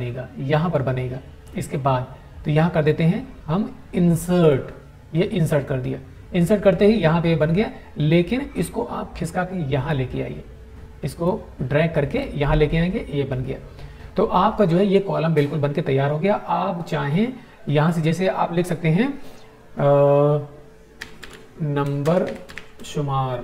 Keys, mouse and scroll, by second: 4.3 click, 8.2-9.9 drag, 17.7 click, 20.8-23.0 typing, 23.2 Tab.